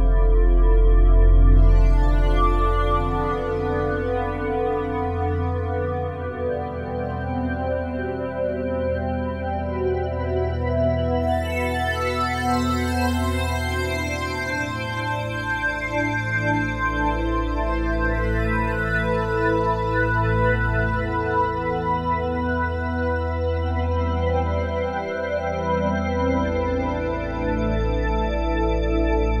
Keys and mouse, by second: 0.3-3.2 drag, 4.4 click, 5.4-13.7 alt+shift+drag, 13.7-14.8 typing, 15.9-16.3 typing, 17.5-20.2 drag, 20.0-20.7 typing, 21.1 click, 22.2 click, 24.1 click, 24.7 click, 25.2 click, 26.4-29.4 drag.